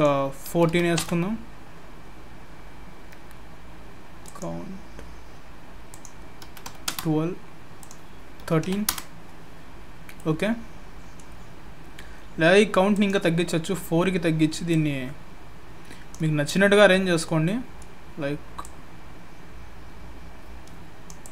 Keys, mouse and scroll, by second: 4.2 click, 5.9 click, 7.8 click, 9.7-10.2 scroll down 2, 10.2 middle click, 12.9 click, 14.7 click, 16.5 middle click, 18.6 click, 21.2 click.